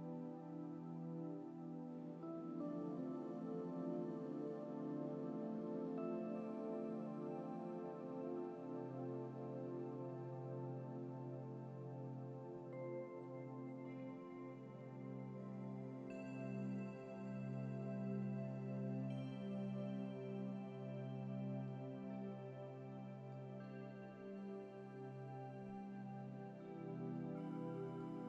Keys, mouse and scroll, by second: 14.0-14.4 scroll down 2, 14.8 scroll down 1, 15.3 scroll up 1, 21.9-23.8 middle drag, 27.3-28.2 middle drag.